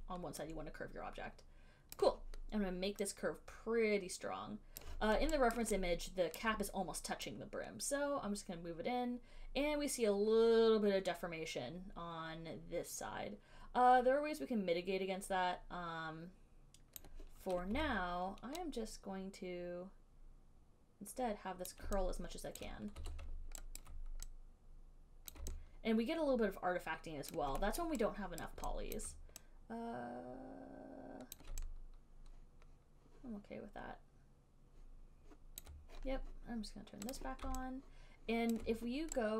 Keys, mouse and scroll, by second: 2.1 click, 5.0 click, 5.8 alt+right click, 6.6 alt+right click, 17.2 click, 18.0 r, 21.9 click, 22.8 alt+click, 23.3 w, 24.1 alt+click, 25.5 click, 27.5 alt+click, 28.1 alt+middle click, 28.7 alt+right click, 29.2 alt+right click, 31.6 click, 37.3 click, 38.8 alt+click.